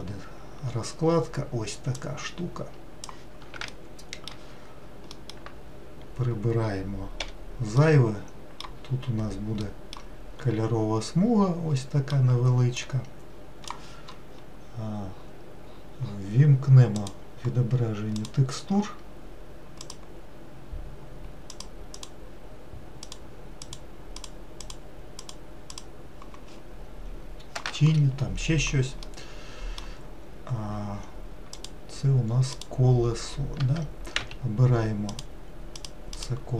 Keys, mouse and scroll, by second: 2.7-4.0 drag, 4.0-7.4 shift+middle drag, 7.4 t, 13.0-26.7 drag, 29.3-31.8 middle drag, 31.8 click, 32.7 click, 33.7 Tab, 34.3 a, 35.3 click, 36.0 click.